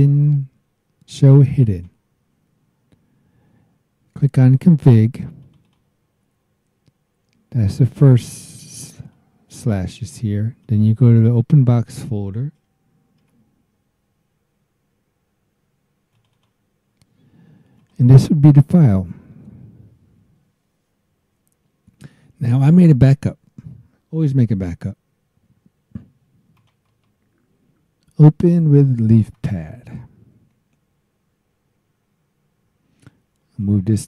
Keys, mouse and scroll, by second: 5.4 click, 9.1-10.3 drag, 10.6 click, 13.2 alt+Tab, 16.1 click, 17.7 click, 22.7 click, 26.5 click, 26.8 right click, 29.3 click, 33.6-34.0 drag.